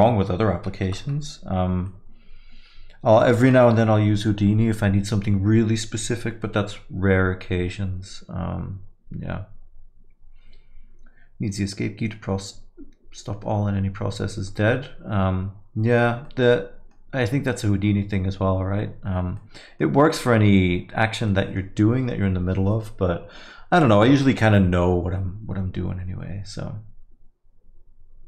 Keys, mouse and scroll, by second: 0.9 shift+Left, 1.9 alt+middle click, 3.5 middle click, 12.4 middle click, 16.3 middle click, 19.4 middle click, 21.3 middle click.